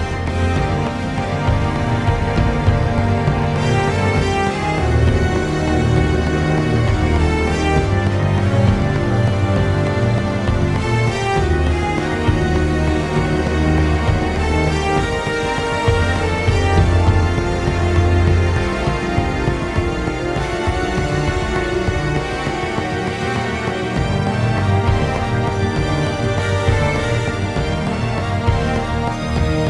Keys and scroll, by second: 7.7 ctrl+z, 11.7 ctrl+z, 15.6 ctrl+z, 15.7 ctrl+z, 15.8 ctrl+z, 15.9 ctrl+z, 16.0 ctrl+z, 20.6-21.6 typing.